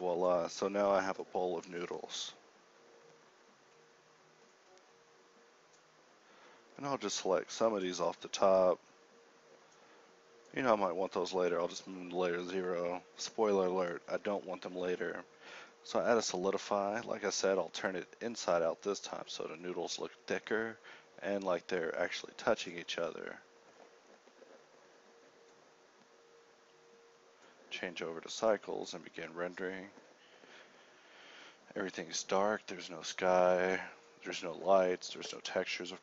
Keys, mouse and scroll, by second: 0.0-0.3 typing, 0.5 ctrl+Tab, 1.8 a, 1.9 a, 6.3 ctrl+l, 6.5 KP_1, 6.7 KP_3, 7.5 p, 8.0 Tab, 9.2 z, 9.6 m, 10.9 Tab, 11.1 Tab, 11.8 ctrl+1, 14.7 middle click, 16.0-18.6 middle drag, 28.2 middle click.